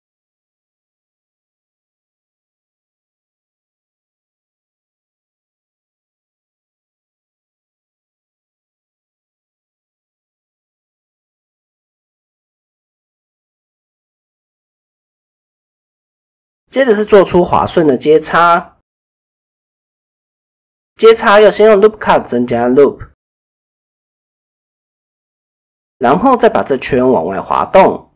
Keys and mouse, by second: 0.1-2.4 middle drag, 2.7 alt+middle click, 3.4 alt+click, 4.8 middle click, 6.4 ctrl+KP_Add, 7.8-9.0 middle drag, 9.2 ctrl+z, 10.4 KP_1, 11.2 shift+middle click, 11.6 click, 12.1 shift+middle click, 12.5 middle click, 13.7 middle click, 14.3 middle click, 15.3 middle click, 15.6-17.6 middle drag, 17.8 middle click, 18.2 middle click, 18.7 KP_1, 19.3 shift+middle click, 20.6 ctrl+r, 22.8 middle click, 25.3 middle click, 25.9-27.6 drag, 25.9 g.